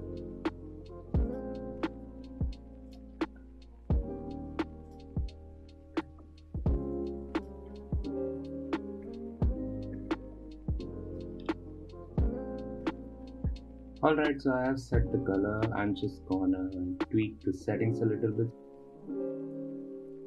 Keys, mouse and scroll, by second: 0.3 click, 1.2 middle click, 1.3 scroll up 1, 1.7 middle click, 1.9 click, 2.9 middle click, 3.2 click, 4.0 scroll up 1, 4.2 click, 6.6 click, 7.8 ctrl+c, 8.2 click, 8.6 ctrl+v, 8.9 drag, 9.1 ctrl+c, 9.2 ctrl+c, 9.4 drag, 9.6 ctrl+v, 9.8 scroll down 5, 9.9 middle click, 9.9 scroll up 1, 10.0 scroll down 1, 10.2-12.1 middle drag, 12.1-13.7 scroll up 3, 14.1-17.1 middle drag, 17.4-19.8 shift+drag.